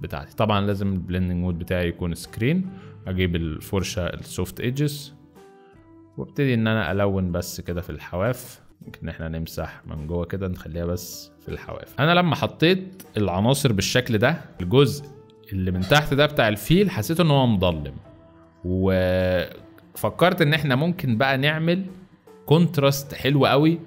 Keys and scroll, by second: 8.7 x, 11.5 z, 13.4-15.0 typing, 18.6 space, 19.5 z, 21.1 z, 23.2 space.